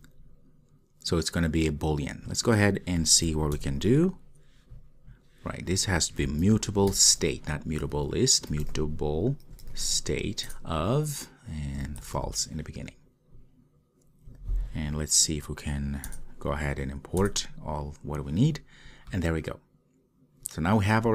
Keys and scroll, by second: 3.5 alt+Return, 3.6 alt+Return, 10.6 Return, 16.0 alt+Return.